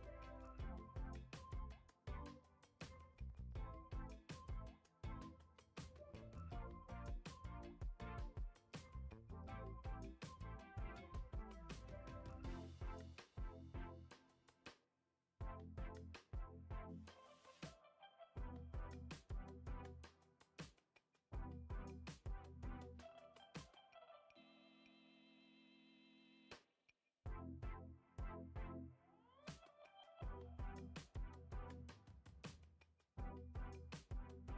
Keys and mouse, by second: 0.6 click, 4.9 F6, 5.7 Tab, 6.3 Tab, 7.2 ctrl+Tab, 10.6 click, 11.3 middle click, 12.9 KP_3, 13.3 KP_9, 14.3 shift+middle click, 14.6 middle click, 16.1-17.3 drag, 17.6 ctrl+z, 17.7 middle click, 18.9-19.9 drag, 20.6 ctrl+z, 21.7-23.1 drag, 23.6 KP_1, 24.6 shift+middle click, 25.1 ctrl+z, 25.4 middle click, 26.4 click, 27.8 KP_1, 28.6 Tab, 30.0 ctrl+z, 30.2 ctrl+z, 30.4 middle click, 31.1-32.6 drag, 32.8 Tab, 33.2 Tab.